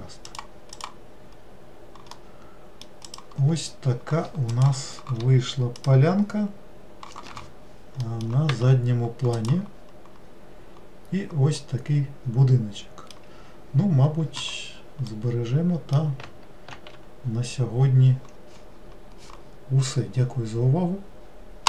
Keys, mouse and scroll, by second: 0.9 click, 1.6 scroll down 2, 2.3-3.3 middle drag, 3.3 click, 8.2 middle click, 8.7 Tab, 9.5 click, 10.3-11.7 scroll up 3, 11.7 scroll up 1, 11.8-14.8 middle drag, 15.3-17.2 middle drag, 17.2 ctrl+s.